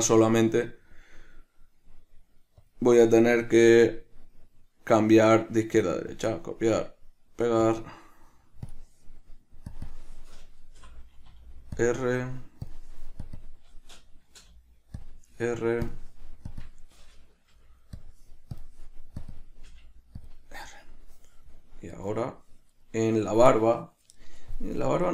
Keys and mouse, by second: 0.4-3.6 right drag, 3.6-4.4 drag, 4.4-8.9 right drag, 8.9 click, 9.9-13.0 drag, 13.5-16.2 drag, 16.8-18.8 drag, 19.5-22.2 drag, 22.2 right click, 23.0 right click, 25.0 right click.